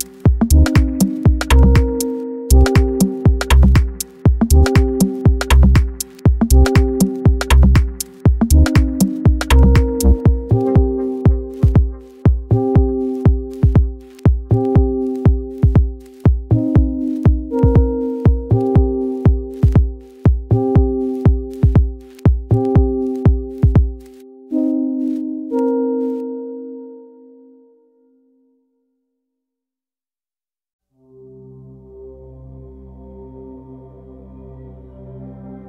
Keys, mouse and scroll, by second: 0.7-1.0 scroll down 4, 1.0 shift+middle drag, 1.3 scroll up 1, 1.3 middle click, 1.6 ctrl+s, 1.9 shift+middle click, 2.5 ctrl+s, 5.5 ctrl+s, 5.8-6.2 scroll up 2, 6.2-6.6 shift+middle drag, 6.6 ctrl+s, 7.8 ctrl+s, 8.5-9.1 shift+middle drag, 9.1 ctrl+s, 11.1 ctrl+s, 13.7 click, 14.0 ctrl+s, 15.0 click, 15.7 scroll down 1, 16.0-16.5 shift+middle drag, 16.5 ctrl+s, 16.8-17.6 middle drag, 17.6-17.9 scroll up 2, 17.9 click, 18.5-19.2 middle drag, 19.2 Tab, 19.8 click, 20.1 2, 20.2 click, 20.4 middle click, 20.9 shift+d, 21.3 g, 22.0 g, 23.0 shift+middle click, 23.2-23.6 scroll up 2, 23.6 alt+middle click, 24.3 shift+middle click, 24.6 z, 24.9-25.3 scroll up 5, 25.3 shift+middle click, 25.8-26.3 scroll down 4, 26.3 g, 27.4 e, 29.7 e, 32.4 e, 33.5 e.